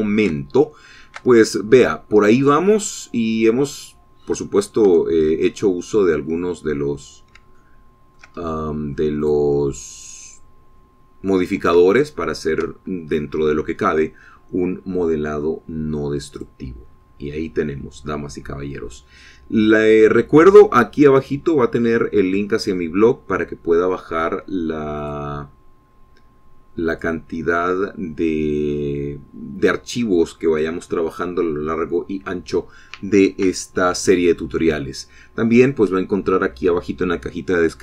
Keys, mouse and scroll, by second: 0.0 middle click, 1.2 scroll up 1, 2.0 shift+click, 2.9-6.0 shift+drag, 6.5 Tab, 7.6 scroll up 2, 8.4 scroll up 2, 8.6 middle click, 9.1 shift+middle click, 10.1 shift+middle click, 10.8 click, 12.0-12.4 scroll down 1, 12.7 scroll up 1, 13.5 shift+middle click, 17.9 click, 18.5-18.8 scroll up 2, 20.4 scroll down 2, 21.3 scroll down 2, 22.0 scroll up 2, 26.6 click, 28.5 click.